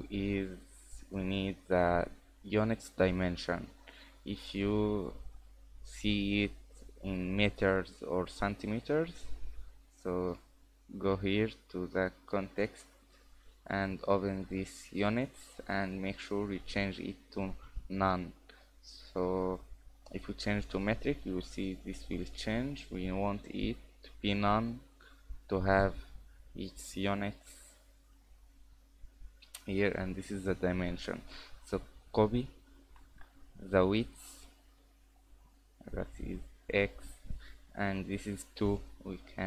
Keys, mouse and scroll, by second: 4.4 click, 6.4 click, 12.3 click, 13.4 click, 14.6 click, 15.3 click, 19.2 click, 22.8 click, 25.1 click, 36.3-38.6 scroll up 2.